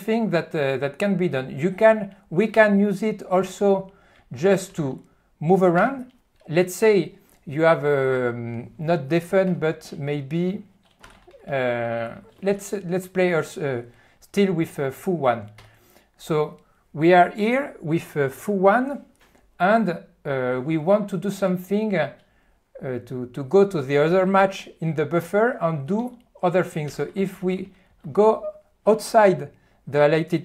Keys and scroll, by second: 3.9-4.8 typing, 11.0-13.0 typing, 26.0 Tab, 27.1-27.9 typing.